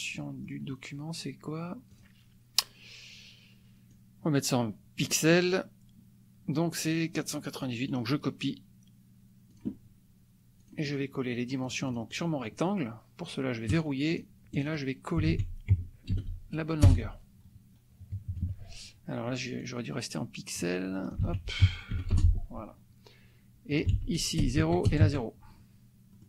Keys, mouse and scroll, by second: 0.2 click, 2.1 click, 4.0-5.2 drag, 7.4 click, 7.8 right click, 9.5 click, 10.6 click, 11.6-12.3 drag, 13.7-14.3 drag, 14.6 click, 15.2 ctrl+a, 16.1 ctrl+v, 16.8 Return, 18.3 KP_Subtract, 19.6-20.7 drag, 21.1 ctrl+click, 21.3 ctrl+a, 22.1 ctrl+Return, 23.7 ctrl+click, 24.0 ctrl+a, 24.3 ctrl+KP_0, 24.6 ctrl+Tab, 24.8 ctrl+KP_0, 25.0 ctrl+Tab, 26.1 click.